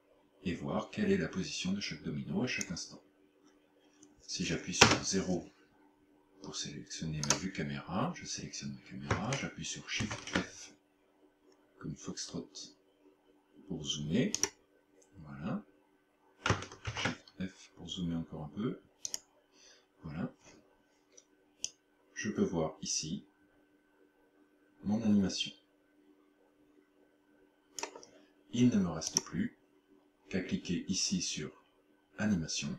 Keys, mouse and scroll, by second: 4.9 KP_0, 7.3 right click, 10.1 shift+f, 14.5 click, 17.0 shift+f, 19.2 click, 21.7 click, 29.1 click.